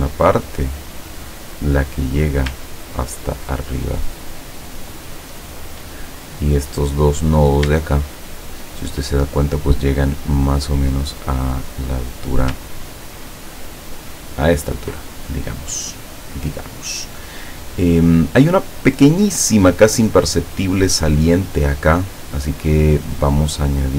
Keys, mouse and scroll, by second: 2.9-3.3 ctrl+scroll up 2, 7.3 click, 8.3 shift+click, 13.0-15.0 ctrl+drag.